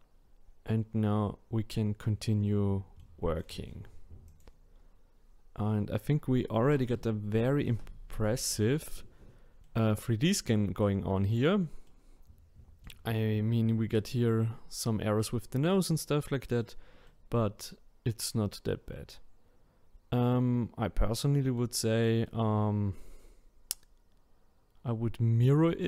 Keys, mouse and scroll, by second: 4.2 click, 5.0-5.8 scroll up 3, 5.8-6.2 scroll up 1, 6.2-9.2 scroll down 1, 9.6-14.8 middle drag, 15.6-20.0 middle drag, 22.2-25.3 middle drag.